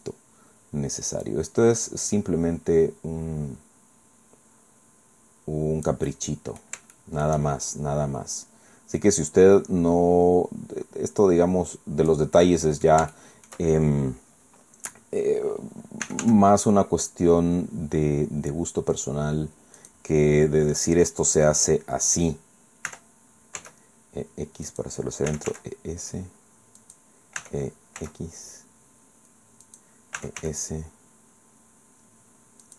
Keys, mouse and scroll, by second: 1.2-6.8 drag, 7.0 shift+click, 7.5-8.2 shift+scroll up 2, 9.0-12.3 drag, 12.4 middle click, 13.1 shift+middle click, 13.2 shift+click, 16.0 e, 16.2 s, 19.8 click, 22.9 e, 23.6 x, 24.7 click, 25.3 e, 25.5 s, 26.8 click, 27.4 e, 28.0 x, 29.6 click, 30.2 e, 30.4 s, 32.6 click.